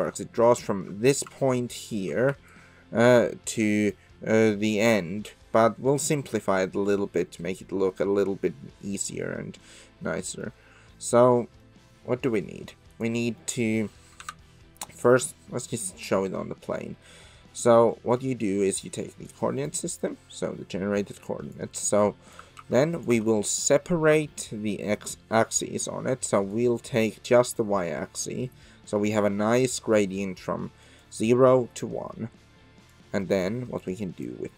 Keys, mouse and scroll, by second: 1.4 d, 1.6-2.2 drag, 2.0 d, 2.3-6.8 d, 2.5-5.3 drag, 5.9 middle click, 6.2 click, 7.4-9.5 middle drag, 9.5 drag, 9.8-10.4 middle drag, 12.9 click, 13.4 middle drag, 14.2 KP_7, 19.3 click, 21.3 click, 22.0 click, 22.6 shift+a, 26.7-27.3 drag, 31.0 click, 32.9 click, 33.9 click.